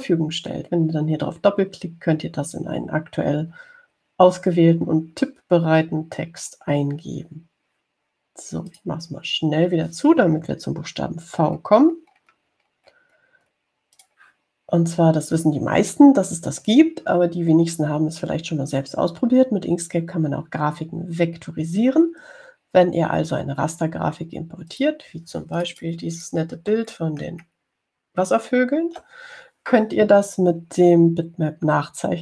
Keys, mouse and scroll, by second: 0.5-1.2 scroll down 4, 10.0 click, 12.7-13.7 scroll down 4, 14.1-14.5 scroll down 2, 14.8-15.1 scroll up 2, 15.3 click, 26.0 click, 26.8 click, 27.4 click, 28.1 ctrl+scroll up 2, 28.8 ctrl+scroll up 2, 29.5 ctrl+scroll up 2.